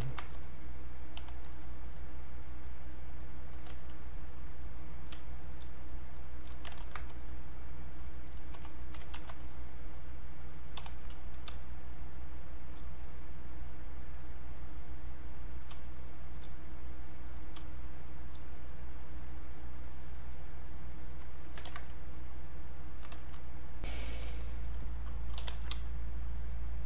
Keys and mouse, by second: 0.0 ctrl+shift+1, 0.3-3.2 shift+drag, 4.6 click, 5.1 space, 5.4 click, 6.8 ctrl+shift+1, 7.2-9.1 drag, 9.1 ctrl+1, 9.4-11.5 drag, 11.5 space, 11.8 click, 12.0 space, 13.1-14.5 drag, 15.8 space, 16.2 click, 16.2 space, 16.9 click, 17.6 space, 17.9 click, 18.1 space, 18.9 click, 21.7 ctrl+z, 22.2 click, 23.8 click, 25.1-26.2 typing, 26.1 click.